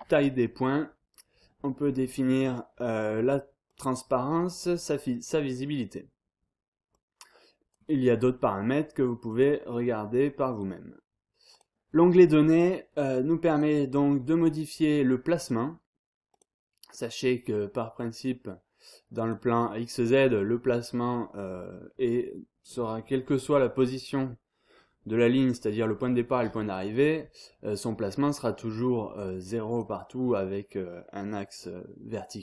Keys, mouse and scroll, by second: 3.7-5.1 drag, 6.9 click, 9.0 click, 10.0 click, 11.5 click, 13.5 click, 15.4 click, 16.3 click, 18.0-19.8 drag, 23.1-23.7 scroll down 1, 28.4-30.3 drag.